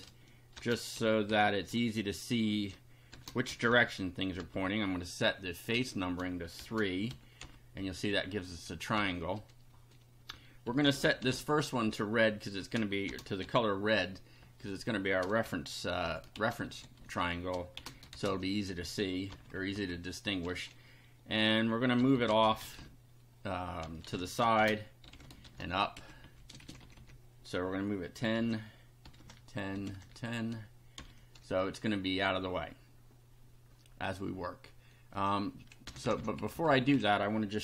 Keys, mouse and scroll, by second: 0.3-1.7 typing, 2.8-4.4 typing, 5.7 3, 6.6 shift+0, 7.1 shift+;, 7.4 shift+F5, 8.9 Home, 10.4-11.8 typing, 13.0 shift+9, 13.4 shift+r, 14.4 BackSpace, 15.4-18.2 typing, 19.3 F5, 19.7 Home, 21.7-26.5 typing, 26.0 shift+Left, 26.2 shift+Right, 26.6 shift+Left, 28.4-30.0 typing, 30.9 F5, 35.1 click, 35.9 Return, 36.4 Up.